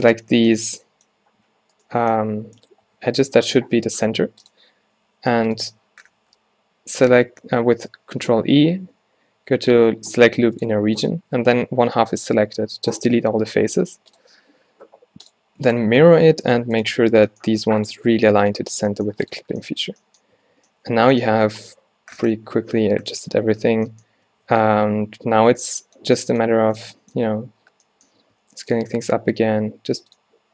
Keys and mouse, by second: 1.8-3.0 middle drag, 3.0 s, 4.5-5.6 drag, 6.3 z, 7.3 ctrl+e, 8.8 ctrl+e, 8.8 click, 12.1 x, 14.2-16.1 drag, 16.1 z, 16.5-19.5 drag, 17.2 g, 18.9 g, 19.5 z, 20.5 a, 20.6 a, 23.9 Tab, 24.3 Tab, 24.6 a, 24.8 a, 28.3 Tab.